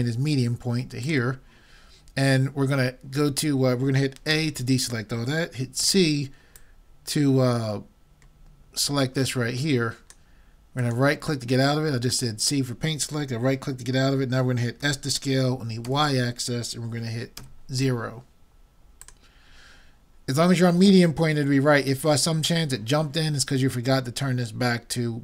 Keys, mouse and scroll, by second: 4.4 a, 5.8 c, 14.9 s, 19.1-20.9 drag.